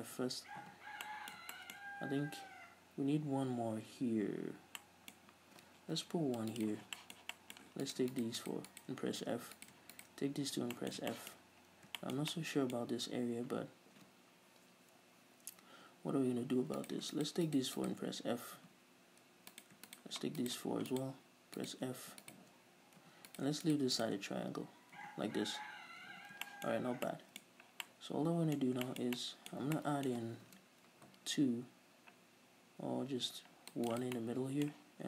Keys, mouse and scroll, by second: 0.8 f, 1.3-6.8 middle drag, 2.1-4.7 scroll up 2, 4.7 scroll down 1, 6.2 ctrl+r, 6.8 click, 6.9 right click, 7.2 shift+middle click, 8.1 right click, 8.3 shift+right click, 8.6 shift+right click, 8.9 shift+right click, 9.6 f, 9.8 right click, 10.2 shift+right click, 10.8 f, 11.0-17.0 middle drag, 11.7-12.2 scroll up 2, 13.1-14.5 scroll up 2, 14.5-16.6 scroll up 1, 16.6-17.0 scroll up 1, 17.0 right click, 17.4 shift+right click, 17.7 shift+right click, 18.0 shift+right click, 18.8 f, 19.7 right click, 20.1-20.5 shift+right drag, 20.6 shift+right click, 21.1 shift+right click, 21.8 shift+right click, 22.4 shift+right click, 23.2 f, 23.5 right click, 23.9 shift+right click, 24.2 shift+right click, 25.2 f, 25.6 scroll down 1, 26.2 a, 26.7-34.2 shift+middle drag, 27.1 scroll down 2, 27.7 scroll up 2, 30.7 ctrl+r, 34.2 click, 34.2 right click, 34.4-35.0 middle drag.